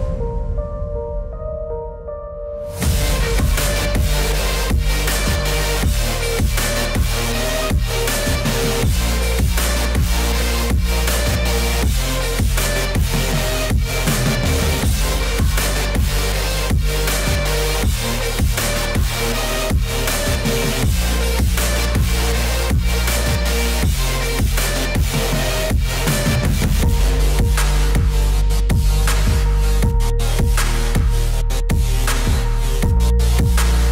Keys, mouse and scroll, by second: 0.8 Up, 2.3 click, 4.1 z, 4.7 click, 6.3 click, 9.6 click, 11.3 click, 12.2 click, 13.8 click, 14.7 click, 15.8 click, 17.9 click, 19.2 click, 21.9 click, 25.1 click, 27.7 alt+click, 29.5 click, 31.5 click.